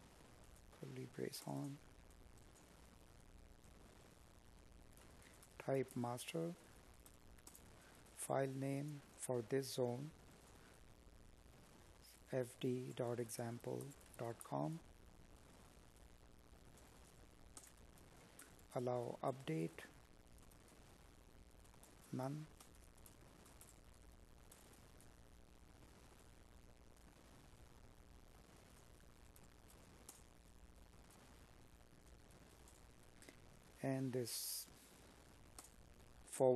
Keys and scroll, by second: 2.3 Tab, 3.0 space, 4.8 Tab, 6.0 space, 14.9 Tab, 17.6 space, 20.1 space, 21.9 space, 34.6 Up.